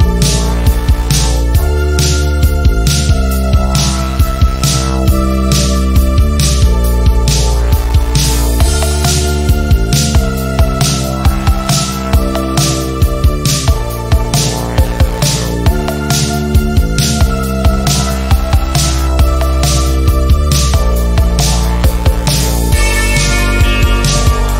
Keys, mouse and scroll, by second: 3.2 z, 3.8 z, 4.1-4.8 drag, 5.6 v, 6.6-8.4 drag, 12.5-14.4 drag, 16.6 F10, 17.3 click, 19.0 Down, 21.0 click, 22.0 z, 22.4-23.0 click, 23.0 v, 23.3 click, 24.1 shift+click.